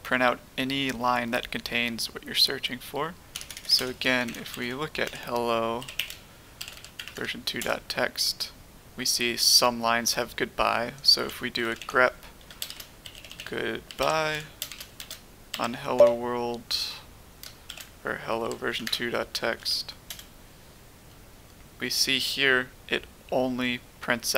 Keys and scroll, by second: 3.3-7.6 typing, 11.3-16.2 typing, 17.4-22.8 typing.